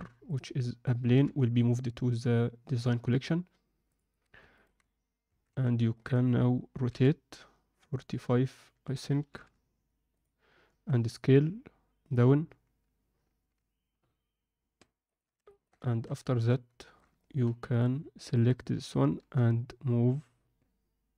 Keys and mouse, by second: 1.1 m, 3.8 click, 5.3 Tab, 5.4 z, 5.9 ctrl+alt+middle click, 6.8 r, 10.6 s, 13.2 g, 15.4 ctrl+alt+middle click, 15.8 alt+shift+middle click, 16.2 ctrl+middle click, 16.8 shift+middle click, 17.2 ctrl+middle click, 18.2 shift+click, 19.2 g.